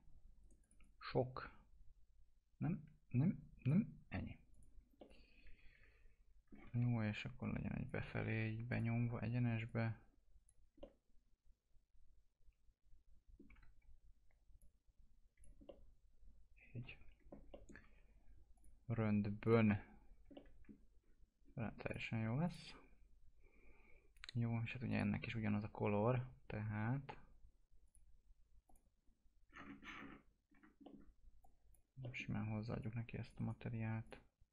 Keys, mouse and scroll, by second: 0.4 right click, 0.6 click, 6.7 e, 7.4 click, 8.2 ctrl+z, 8.7 click, 10.8-13.6 alt+middle drag, 13.6 w, 14.6 click, 15.7-17.5 alt+middle drag, 18.6 click, 19.7 F4, 19.9-20.2 scroll down 1, 20.3 alt+middle click, 21.0 scroll down 1, 21.6-21.9 scroll up 1, 21.9 click, 24.9 click, 27.9 click, 29.5-30.3 scroll down 1, 30.8 middle click, 31.4 click, 32.0 middle click, 32.8 click, 33.4 right click, 34.1 click.